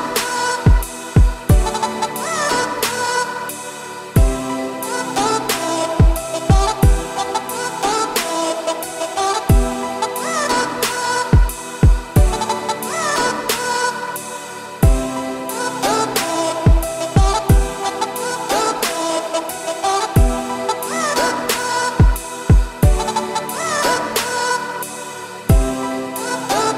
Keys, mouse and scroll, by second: 2.1-3.6 middle drag, 3.6-3.9 scroll up 2, 3.9 Tab, 4.7 middle drag, 5.0-5.3 scroll up 2, 5.3-8.3 shift+middle drag, 8.9 Tab, 9.6-10.0 scroll down 1, 10.1 click, 10.3 3, 10.5 click, 10.8-12.2 middle drag, 12.2 shift+click, 12.6 middle click, 13.4 shift+d, 14.6 p, 15.2 Tab, 15.3 click, 15.7 Tab, 16.1 a, 16.6 click, 16.8 2, 16.9 click, 17.2 `, 17.9 scroll up 2, 18.1 shift+middle click, 18.4 scroll up 4, 18.6 z, 19.2 g, 22.4-22.7 scroll down 3, 22.7 1, 23.3-23.9 scroll down 4, 23.5 z, 23.9 middle click, 24.3 a, 25.4 F3.